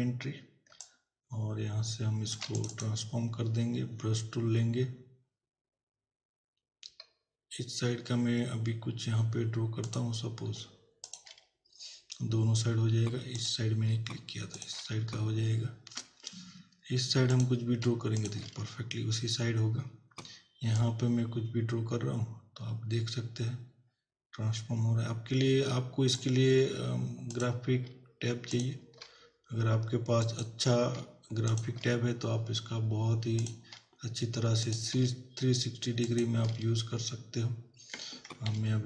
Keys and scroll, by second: 38.6 ctrl+=.